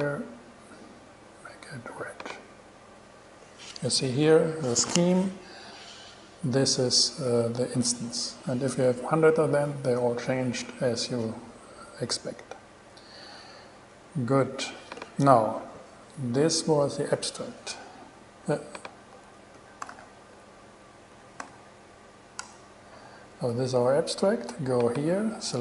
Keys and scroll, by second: 19.3 a, 19.9 s, 21.3 c, 21.6 t, 22.6 Return.